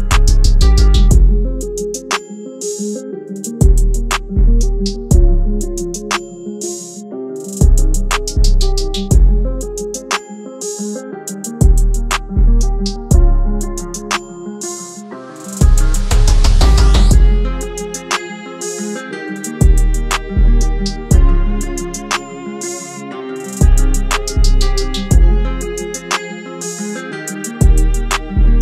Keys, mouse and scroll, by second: 7.6 double click, 18.2 double click, 19.9 typing, 21.5-22.0 typing, 27.0 typing.